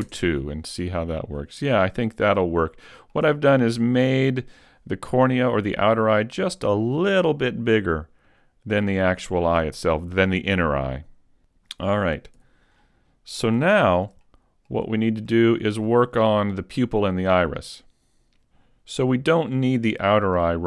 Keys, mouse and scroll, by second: 1.2-2.2 scroll down 1, 2.2-2.7 scroll down 1, 2.7 middle click, 3.4 shift+middle click, 4.0-4.7 scroll up 2, 12.4 n, 12.7-13.7 scroll down 2, 13.7 shift+middle click, 13.7-14.2 scroll down 3, 14.2 middle click, 15.0 shift+middle click, 15.3 shift+scroll up 1.